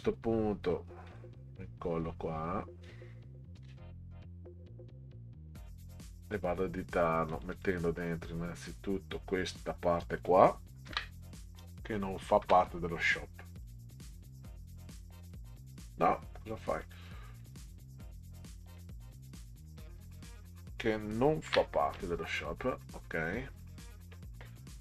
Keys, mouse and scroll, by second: 1.1 click, 3.5 ctrl+v, 5.1-6.3 drag, 7.3 click, 7.5 click, 8.5-9.6 drag, 10.8 ctrl+c, 12.4 BackSpace, 13.5 click, 13.7 click, 14.8-16.0 drag, 16.8 click, 17.4 click, 17.6 click, 18.6-20.3 drag, 21.5 ctrl+v.